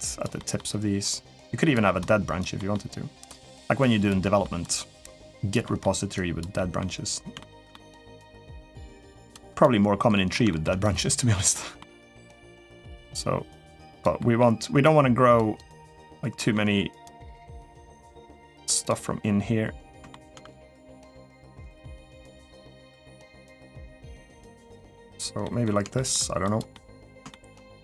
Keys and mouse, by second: 0.1 middle click, 0.8 click, 1.9 click, 2.4 middle click, 3.1 click, 3.6 click, 4.0 middle click, 4.5 click, 5.4 middle click, 6.0 click, 6.3 middle click, 7.2 shift+middle click, 7.5 middle click, 7.9 click, 8.7 click, 9.1 click, 9.3 click, 9.9 middle click, 10.3 shift+middle click, 10.7 click, 11.4 middle click, 12.0 click, 12.2 middle click, 12.8-13.8 drag, 14.0 middle click, 14.6 click, 15.4 click, 16.2 middle click, 16.8 click, 17.7 middle click, 18.6 click, 19.9 shift+middle click, 20.3 click, 21.4 click, 22.3 middle click, 23.3 click, 23.7 middle click, 24.4 click, 25.2 middle click, 25.7 shift+middle click, 26.3 click, 26.5 middle click, 27.1 shift+middle click, 27.5 click.